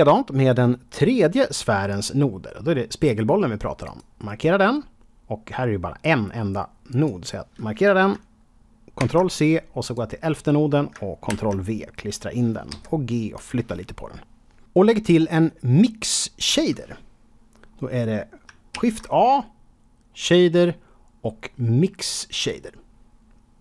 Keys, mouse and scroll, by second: 3.8 click, 6.0 click, 6.8 click, 8.9 ctrl+c, 9.8 click, 11.2 ctrl+v, 12.6 g, 13.3 click, 17.6-18.4 scroll up 2, 18.7 shift+a, 22.3 click.